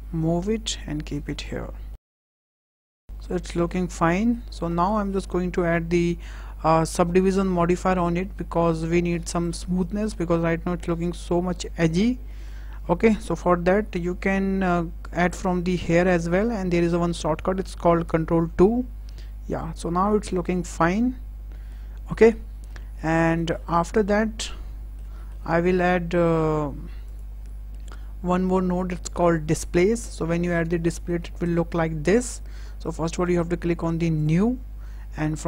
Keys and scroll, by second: 2.4 s, 3.0 Tab, 18.3 ctrl+2.